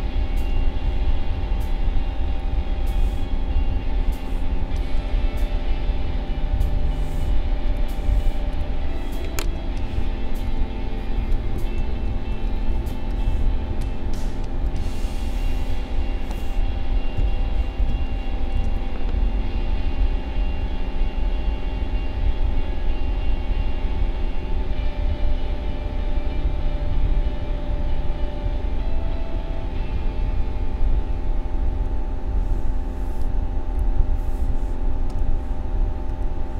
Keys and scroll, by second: 9.5 space, 11.7 ctrl+=, 12.9 space, 17.1 n, 17.9 space.